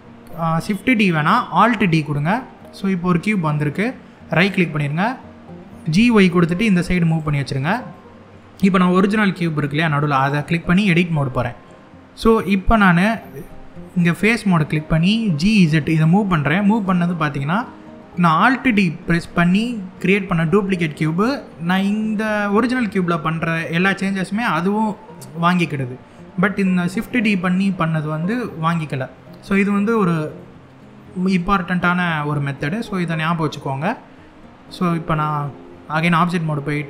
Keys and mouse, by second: 1.4 alt+d, 4.0 right click, 5.5 g, 5.7 y, 6.7 click, 7.6 click, 9.9 click, 10.6 Tab, 13.0 3, 13.6 click, 15.0 g, 15.2 z, 16.3 click, 23.1 middle click, 27.8 middle click, 30.0 middle click, 32.9 middle click, 35.1 Tab.